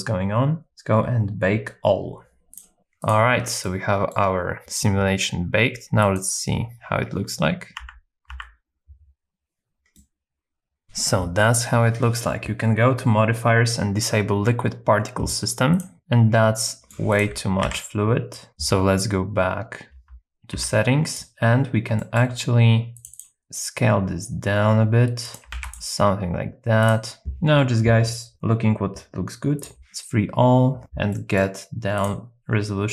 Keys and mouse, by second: 2.5 click, 3.6 middle click, 6.1 click, 7.9 Right, 8.5 Right, 10.0 middle click, 10.8 KP_0, 15.7 click, 15.9 Right, 15.9 Left, 16.6 middle click, 17.1 click, 17.8 alt+z, 18.3 middle click, 19.9 n, 20.6 n, 22.0 shift+middle click, 23.2 click, 23.4 s, 25.3 click, 25.5 ctrl+a, 25.8 ctrl+a, 31.2 middle click, 32.1-32.9 drag.